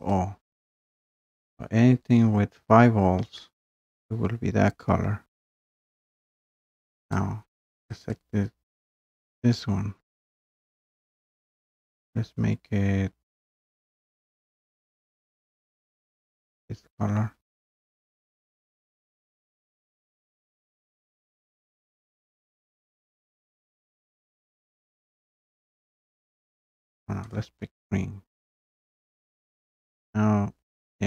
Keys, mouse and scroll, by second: 1.3 scroll down 1, 2.8 scroll up 1, 2.9 scroll down 1, 3.2 scroll up 1, 7.1 click, 7.1-7.5 scroll up 1, 8.0 click, 8.2 click, 13.2-14.5 drag, 16.5-21.5 drag, 24.2 click, 25.6 click, 27.4 click, 29.4-30.0 scroll, 30.0-30.5 scroll down 1.